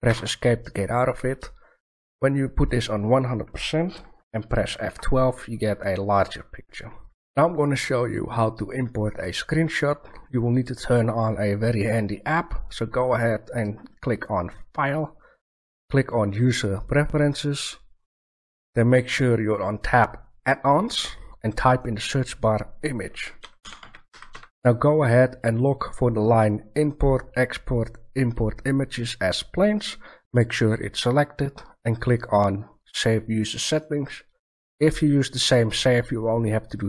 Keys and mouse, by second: 0.0 Escape, 14.0-16.1 drag.